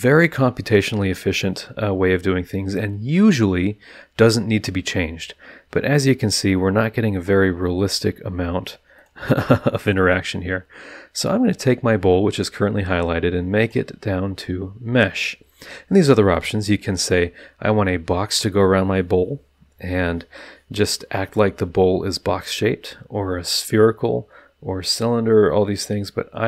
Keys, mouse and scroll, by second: 7.1 click, 8.9 click, 9.7 click, 13.6 click.